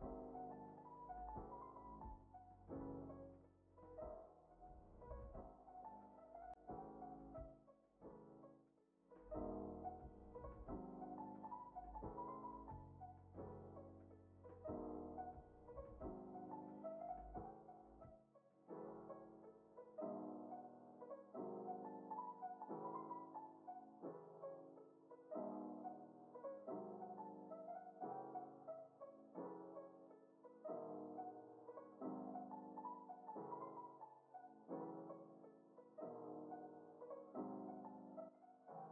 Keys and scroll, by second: 2.6 alt+[, 3.0 ctrl+s, 4.1 z, 9.4 Up, 13.9 Down, 20.0 ctrl+c, 22.8 ctrl+s, 28.1 alt+[, 28.6 ctrl+s, 34.1 z, 36.1 x, 37.6 Up.